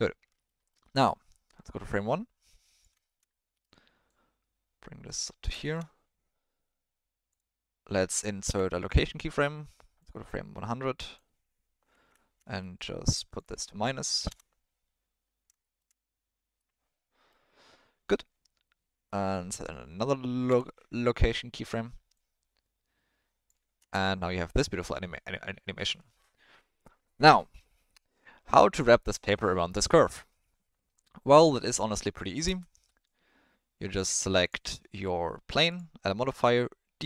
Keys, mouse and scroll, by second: 0.6 alt+middle drag, 1.9-2.8 drag, 3.1 shift+middle click, 3.3 middle click, 4.1-5.4 drag, 5.7 shift+middle click, 7.3 click, 10.0-11.1 drag, 12.7-14.3 drag, 15.6 shift+middle click, 16.6-17.3 middle drag, 20.5 i, 22.1-23.4 drag, 23.8 space, 32.5 space, 33.0-34.0 drag, 35.8-37.0 drag.